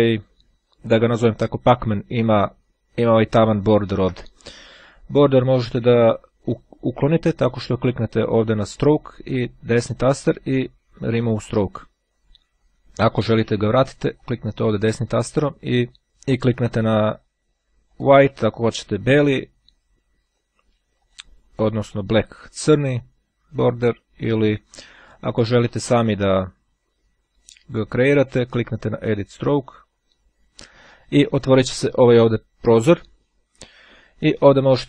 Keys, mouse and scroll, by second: 9.5 right click, 10.9-11.9 drag, 13.8 right click, 17.9 click, 20.4-21.7 right drag, 21.9 click, 24.1-28.2 right drag, 29.0 click.